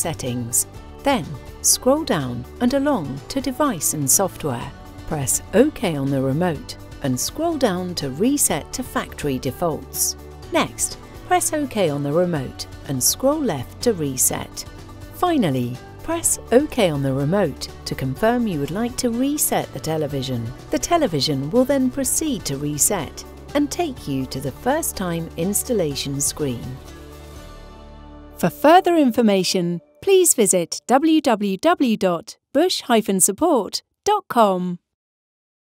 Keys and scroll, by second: 1.3 Down, 2.4 Right, 5.4 Return, 7.1 Down, 10.4 Return, 12.5 Left, 15.2 Return.